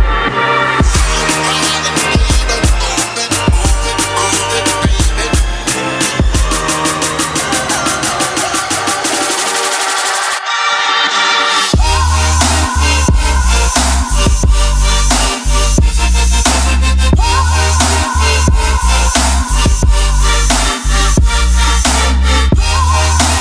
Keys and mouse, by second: 0.0 click, 2.6 shift+middle drag, 3.4 shift+middle drag, 4.0 ctrl+middle drag, 5.7 click, 7.5 ctrl+s, 8.4 click, 8.8 click, 10.3-11.9 drag, 12.0 KP_Decimal, 13.2 ctrl+middle click, 13.6 middle click, 14.9 click, 17.9 click, 23.2 click.